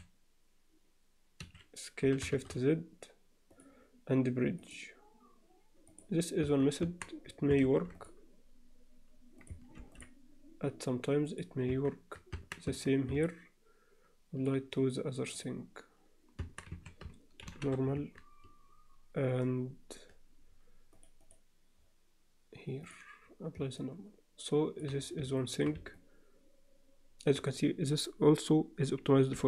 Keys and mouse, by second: 2.0 s, 4.6-6.0 drag, 6.4 Tab, 6.8 Tab, 7.8 ctrl+r, 9.8 ctrl+r, 11.7 Tab, 12.4 Tab, 12.6 Tab, 13.2-14.5 alt+middle drag, 14.8 right click, 16.4 Tab, 16.7 a, 17.4 shift+n, 18.0 Tab, 21.0 click, 22.8 click, 23.8-24.8 alt+middle drag, 25.4 alt+shift+middle drag, 26.0-27.3 alt+middle drag.